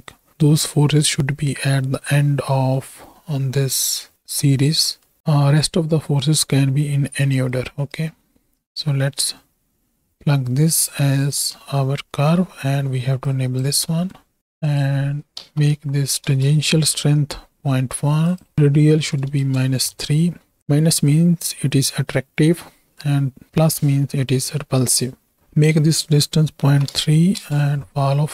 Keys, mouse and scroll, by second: 1.8 middle click, 2.1-2.8 scroll up 1, 2.8 middle click, 6.3 middle click, 7.1 click, 8.7-10.9 drag, 11.2 middle click, 12.2 middle click, 13.3 click, 13.9 middle click, 14.7-16.3 drag, 18.3-19.4 drag, 25.4-27.4 drag.